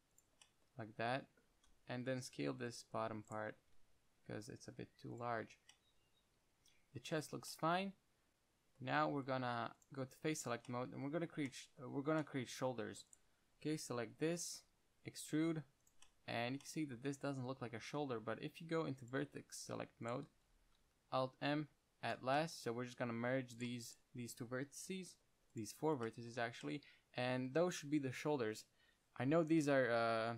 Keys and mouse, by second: 2.2-4.1 typing, 3.0-3.6 right drag, 3.6 click, 5.3-5.7 drag, 6.0-6.7 middle drag, 8.3 middle click, 9.4 ctrl+Tab, 11.0-12.1 drag, 14.3 KP_1, 15.3 e, 16.2 click, 18.0 ctrl+Tab, 19.9-22.2 drag, 21.4 alt+m, 22.7-23.9 drag, 25.1 alt+m.